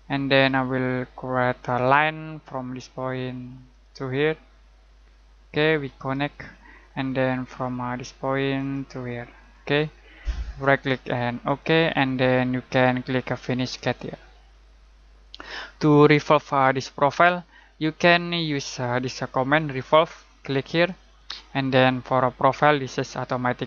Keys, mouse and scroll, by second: 7.2-8.5 scroll down 1, 8.5 click, 9.7 scroll down 1, 9.8-10.2 scroll up 1, 10.6 right click, 11.4 click, 11.9 middle click, 13.7 click, 20.7 click.